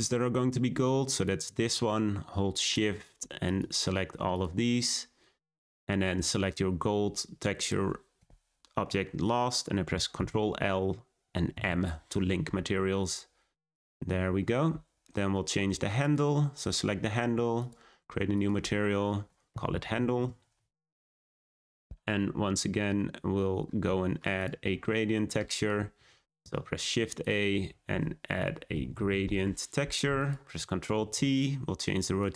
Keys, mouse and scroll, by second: 1.2 click, 3.5 shift+click, 4.3 shift+click, 7.6 shift+click, 11.5 ctrl+l, 16.1 click, 17.6-21.3 drag, 24.3-29.3 drag, 29.3 shift+a, 30.9 ctrl+t.